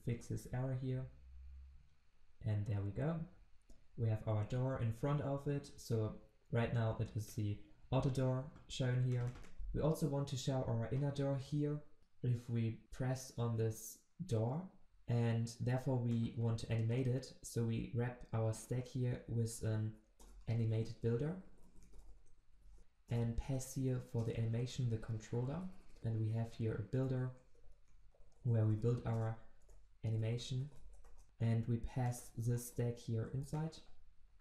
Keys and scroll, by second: 18.6 alt+Return, 24.2 Return, 26.9 Return, 32.5 ctrl+w, 33.1 ctrl+x.